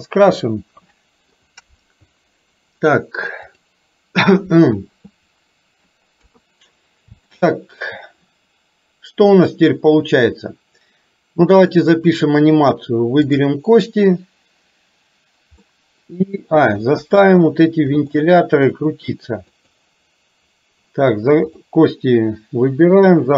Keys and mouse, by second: 0.6 middle click, 1.2 middle click, 6.3 KP_3, 7.4 shift+middle click, 13.3 click, 15.7 middle click, 17.1 KP_1, 18.2 middle click, 19.6 click, 21.7-23.3 drag.